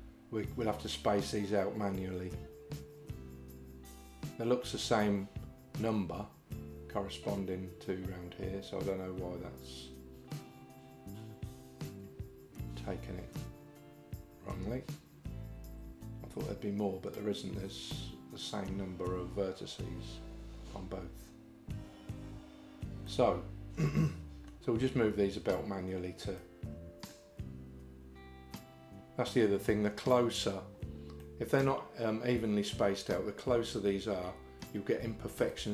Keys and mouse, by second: 23.1-24.5 middle drag, 26.4 middle click, 31.2 middle click, 35.5 middle click.